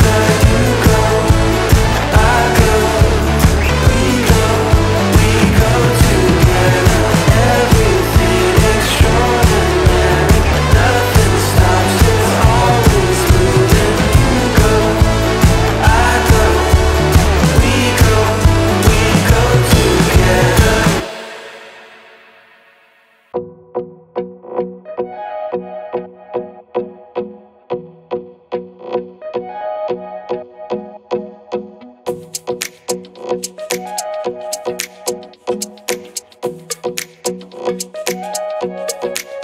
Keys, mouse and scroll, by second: 0.1-2.4 drag, 5.6 click, 5.7-19.7 drag, 21.1-34.7 drag, 34.7-39.4 drag.